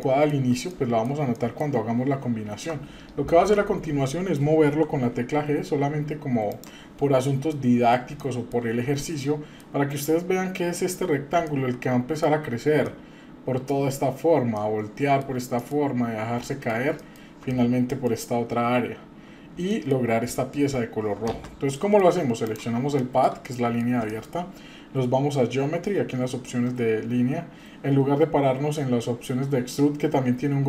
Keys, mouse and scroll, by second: 0.0-0.5 shift+middle drag, 0.7-1.0 middle drag, 1.4-1.8 shift+middle drag, 2.1 scroll down 1, 3.4 KP_7, 4.6 g, 6.9-7.4 scroll up 2, 7.5 middle click, 8.2 shift+middle click, 8.7 scroll up 2, 9.0 middle click, 11.5-12.4 shift+middle drag, 12.9-15.2 shift+middle drag, 15.6 middle click, 16.4 middle click, 17.0 middle click, 17.1 scroll down 1, 17.5 middle click, 18.1-18.8 scroll down 1, 18.8-19.5 scroll down 1, 19.7 shift+middle click, 21.7 shift+middle drag, 22.5 click, 23.0 shift+middle click, 23.4-23.8 middle drag, 24.1 shift+middle click, 27.0-30.1 scroll down 2.